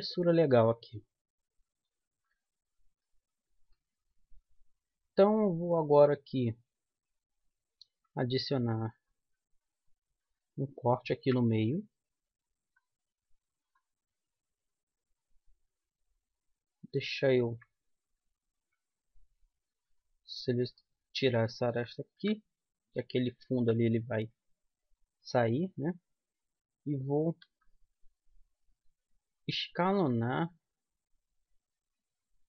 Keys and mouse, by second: 5.7-7.6 middle drag, 9.2-10.3 middle drag, 9.7 a, 11.5 ctrl+r, 19.9-21.8 drag, 21.1 right click, 21.9 right click, 22.5 KP_3, 23.9 KP_1, 27.8 z, 30.3 s.